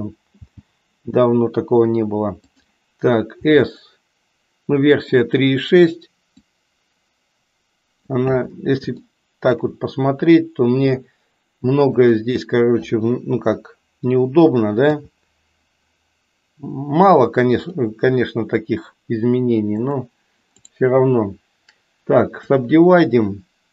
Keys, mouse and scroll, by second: 0.5 g, 3.3 s, 6.3-8.1 drag, 9.0 shift+middle click, 11.8 click, 15.0 e, 19.7 click.